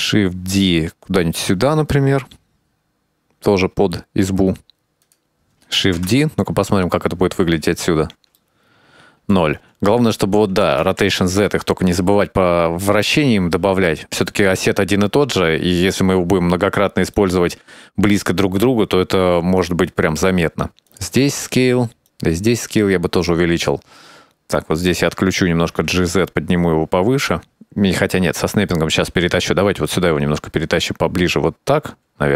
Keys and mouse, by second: 0.0 shift+d, 2.4-4.2 middle drag, 5.3 shift+d, 6.7 KP_0, 8.6-10.1 middle drag, 11.1 r, 16.3-16.7 right drag, 18.1 s, 22.6 s, 25.8 click, 26.4 g, 30.9 g, 32.3 middle click.